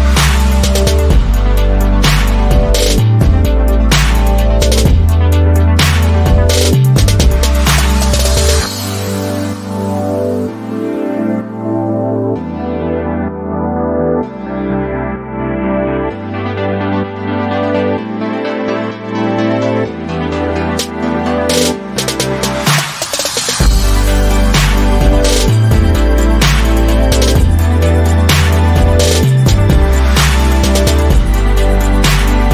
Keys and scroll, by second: 3.5 ctrl+[, 24.0 ctrl+a, 24.4-25.1 typing.